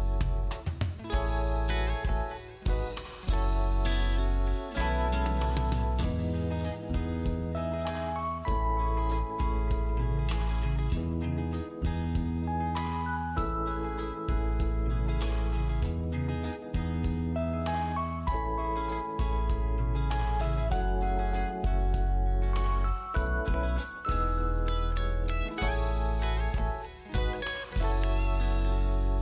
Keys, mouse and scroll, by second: 0.9 scroll down 1, 1.0 click, 1.4 scroll up 1, 1.5 click, 3.4 scroll down 1, 3.6 click, 4.1 space, 5.0 space, 5.7 click, 6.6 right click, 7.0 click, 7.4 right click, 8.3 click, 10.0 scroll up 1, 10.2 click, 11.1 scroll down 1, 11.2 click, 11.4-11.9 scroll up 1, 11.9 click, 12.8 space, 13.1 click, 13.3 click, 13.9 Delete, 14.1 click, 19.0 right click, 19.2 click, 20.8 g, 21.3 click, 26.8 space, 28.7 g, 29.1 click.